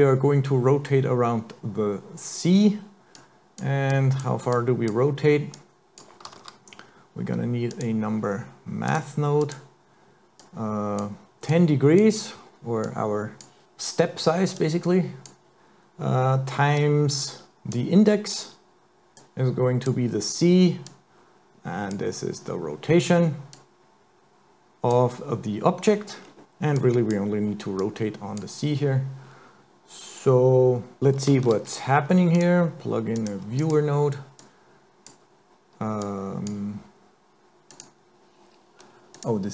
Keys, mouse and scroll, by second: 3.2 click, 3.9 click, 4.5 click, 5.5 click, 6.4 shift+a, 10.4 click, 11.5 click, 12.9 click, 14.6 click, 16.8 click, 19.2 click, 20.9 click, 23.6 click, 24.7 click, 26.3 scroll down 4, 26.4 scroll up 3, 26.8 click, 27.8 click, 31.5 shift+a, 34.4 click, 36.0 click, 37.7 click, 39.2 click.